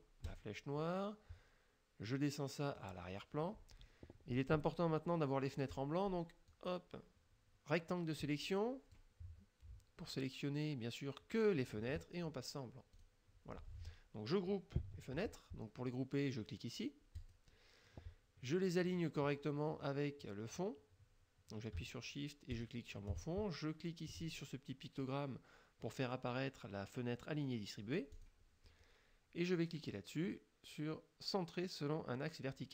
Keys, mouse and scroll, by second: 0.3 click, 2.8 click, 6.5-9.2 drag, 13.0 click, 17.3 click, 22.6 shift+click, 28.2 click.